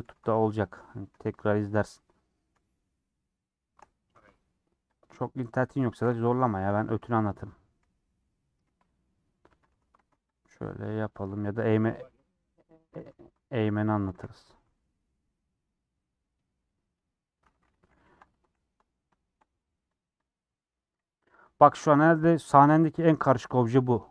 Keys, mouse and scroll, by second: 0.0 3, 0.3-1.9 middle drag, 2.1-3.2 middle drag, 3.2 alt+shift+click, 3.9-5.0 middle drag, 5.0 alt+shift+click, 5.9 alt+shift+click, 6.7 ;, 7.2 middle click, 7.8 3, 8.7 KP_1, 10.0 alt+z, 10.9 click, 11.8 ;, 13.0 alt+z, 13.2 middle click, 14.1 a, 14.3 u, 17.6 middle click, 17.9 /, 18.3 Tab, 18.5 h, 19.2 shift+middle click, 19.5-19.9 scroll down 3, 19.9 click, 20.4 scroll up 1, 20.5-22.5 middle drag, 22.5 /, 22.9-24.1 middle drag.